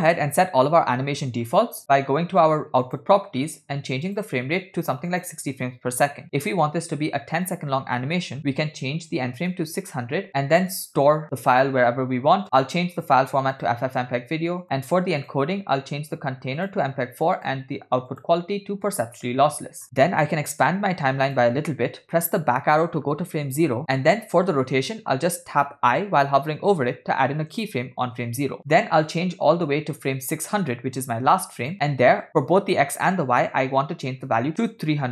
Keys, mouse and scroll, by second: 1.7-2.3 scroll down 1, 2.9 click, 4.1-5.4 drag, 7.5-9.6 drag, 9.1 0, 10.3 scroll down 4, 10.7 click, 11.3 /, 13.0-13.8 drag, 14.2 scroll down 3, 15.3 click, 15.6 scroll down 1, 16.6-17.6 drag, 18.1-19.1 drag, 19.9 scroll up 6, 20.5 click, 22.7 Left, 28.7-30.1 middle drag, 28.7 scroll down 3, 31.7 click.